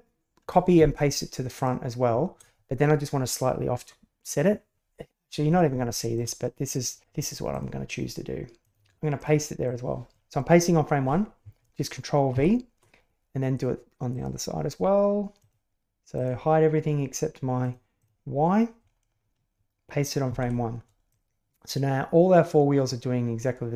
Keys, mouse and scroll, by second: 1.5 right click, 5.9 shift+middle click, 6.3-7.0 middle drag, 7.5 drag, 8.6 click, 9.1 click, 9.6-10.1 drag, 12.3 ctrl+v, 14.1 click, 15.3 drag, 16.1 click, 17.6 click, 17.9 click, 20.2 ctrl+v, 21.1-23.2 drag, 23.2-23.7 right drag.